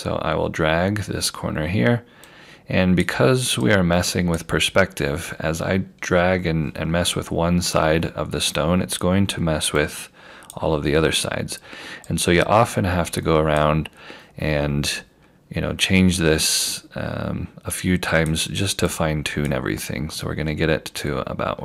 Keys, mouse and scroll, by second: 2.3 click, 5.4 scroll down 1, 6.0-6.9 scroll up 1, 6.9-7.2 scroll down 1, 7.8 scroll up 1, 9.8 click, 14.7 scroll down 1, 15.8-16.5 scroll up 1, 17.8 click, 20.7-21.6 scroll down 1.